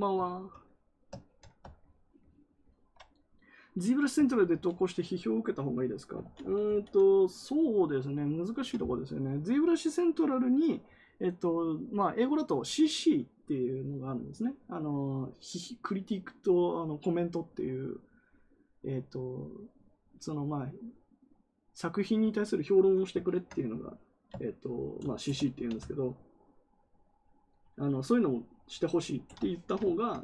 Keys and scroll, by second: 4.2 ctrl+z, 4.4 ctrl+z, 6.1 ctrl+z, 6.3 ctrl+z, 6.6 ctrl+z.